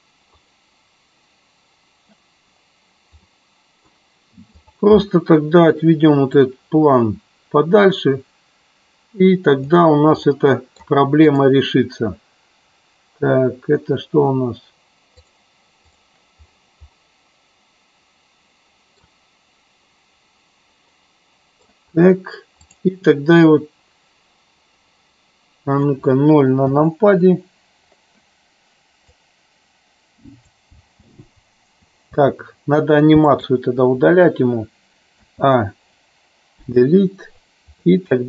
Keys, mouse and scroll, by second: 3.4-3.9 middle drag, 4.6 click, 6.5-9.9 drag, 10.3 middle click, 11.3 click, 15.3 click, 15.9 click, 17.0-19.1 middle drag, 21.0 middle click, 22.7 click, 26.7 KP_0, 29.0-30.6 drag, 30.9 space, 31.0 space, 33.2 space, 33.4 click, 35.1 a, 36.8 Delete, 38.0 middle click.